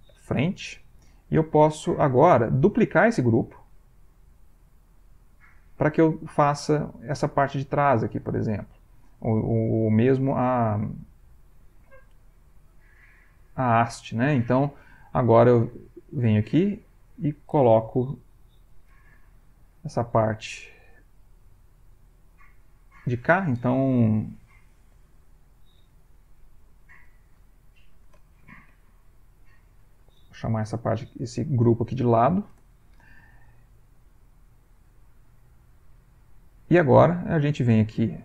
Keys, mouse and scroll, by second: 0.0 shift+f, 0.3 shift+n, 0.6 shift+Return, 2.6 click, 4.9 click, 15.7 click, 16.8 click, 20.9 click, 25.8-32.3 typing, 32.5 Return, 34.2 click, 35.3-36.5 middle drag, 37.9 click.